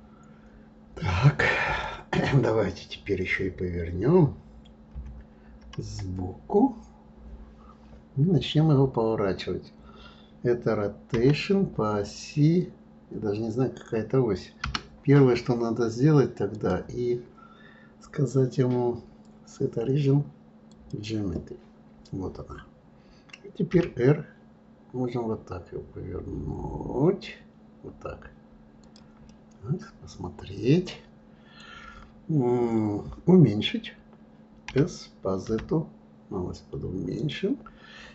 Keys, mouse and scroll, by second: 4.9 KP_3, 16.5-19.6 drag, 29.3-32.3 middle drag.